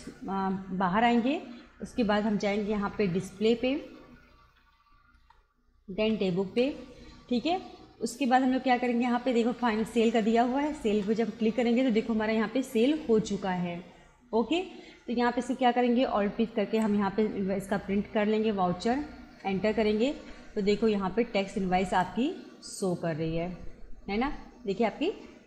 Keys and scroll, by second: 2.3 Down, 5.2 Return, 6.0 Down, 6.5 Return, 8.9 Down, 10.2 Up, 11.0 Return, 16.7 alt+p, 19.3 Return.